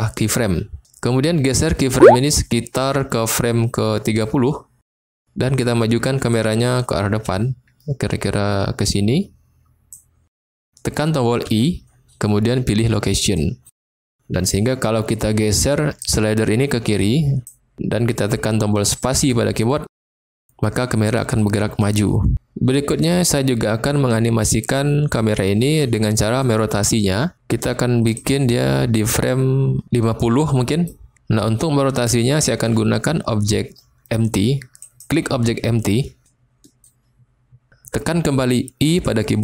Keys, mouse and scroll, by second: 1.4-4.2 drag, 6.5-9.8 drag, 11.5 i, 16.0-17.5 drag, 19.1 space, 20.2 space, 24.5-26.4 drag, 28.1-30.9 drag, 34.9 click, 36.9-37.6 shift+middle drag, 38.9 i.